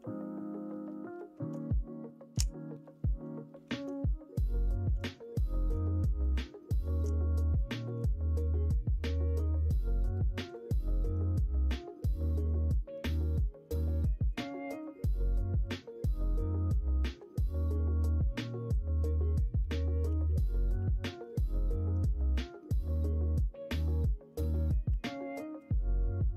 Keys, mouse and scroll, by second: 6.2-6.8 shift+scroll up 1, 6.8 shift+middle click, 7.5 shift+middle click, 10.9 Tab, 11.7-12.2 middle drag, 12.3 shift+a, 14.6 middle click, 15.3 KP_1, 15.6 KP_3, 17.1 Tab, 20.0 g, 22.0 ctrl+z, 23.1 middle click, 24.3 r.